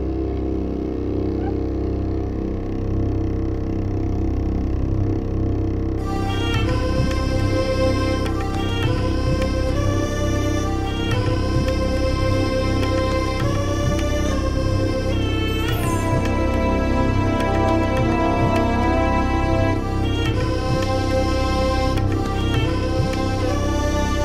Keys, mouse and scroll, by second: 2.6 click, 2.8 click, 3.2 ctrl+v, 3.6 ctrl+scroll up 2, 4.1 ctrl+scroll up 2, 4.4 ctrl+click, 5.2-7.7 typing, 8.7 click, 9.4 click, 10.3 click, 11.3 click, 12.5 click, 13.0 click, 13.9 click, 14.2-14.5 ctrl+scroll down 4, 15.3 ctrl+scroll down 2, 18.0-19.3 drag, 19.4 ctrl+scroll up 2, 19.6 ctrl+middle click, 20.2-21.2 middle drag, 21.4 ctrl+scroll down 2, 21.7 ctrl+middle click, 22.0 ctrl+scroll down 2, 22.4 middle click, 23.0 ctrl+scroll up 2, 23.6 click, 23.8 ctrl+scroll up 2.